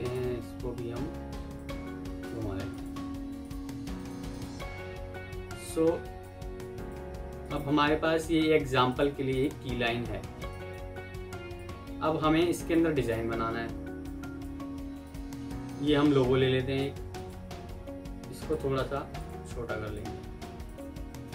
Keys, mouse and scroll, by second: 2.6 shift+click, 4.0 c, 4.2 shift+click, 4.4 c, 5.2 F3, 5.8-6.1 alt+scroll up 2, 6.1 alt+click, 7.3 right click, 9.2 double click, 13.6 F2, 17.0 shift+click, 17.3 c, 18.0 F2, 18.8 Escape, 20.5 shift+click, 20.8 c, 21.1 Escape.